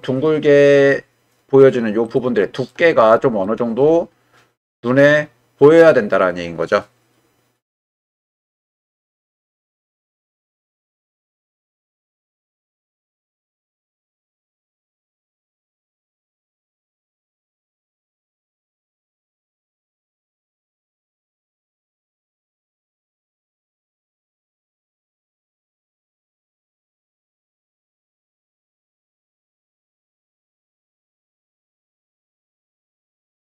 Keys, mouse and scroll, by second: 11.4 middle click, 12.5 click, 12.8-14.3 middle drag, 15.4 g, 16.3 click, 17.0 click, 17.3 g, 18.2 click, 18.9 click, 20.6-22.3 middle drag, 22.7 shift+middle click, 23.6-24.6 middle drag, 25.3 click, 25.7 g, 26.8 middle click, 28.0 click, 28.4 g, 29.7 middle click, 30.6 middle click, 31.2 middle click, 32.2 click, 33.2 click.